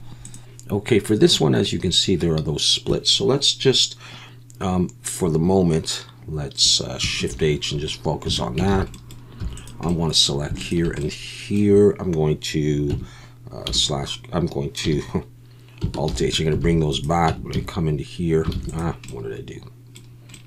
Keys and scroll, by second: 7.3 shift+h, 8.3 Tab, 8.7 alt+a, 9.4 3, 12.9 Tab, 13.7 /, 14.8 /, 16.1 alt+h, 16.6 alt+a, 17.3 Tab, 17.5 a, 18.5 alt+a.